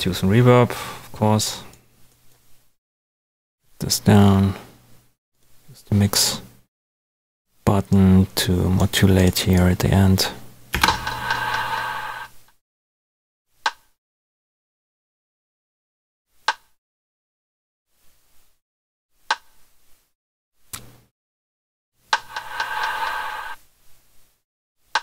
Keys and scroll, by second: 10.7 space.